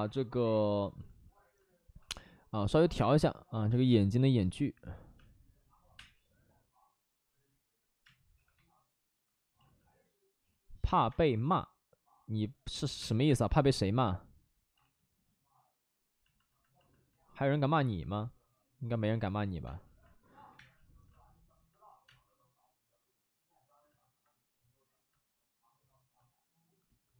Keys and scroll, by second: 2.5 alt+s, 2.7 alt+s, 2.9 space, 3.6 space, 5.2 space, 5.7 5, 5.8 space, 8.0 space, 8.3 3, 8.4 3, 9.5 ctrl+z, 11.0 space, 12.8-13.8 typing, 14.7 ctrl+z, 19.6 space, 20.4 1, 20.5 space, 22.0 space, 26.4 space.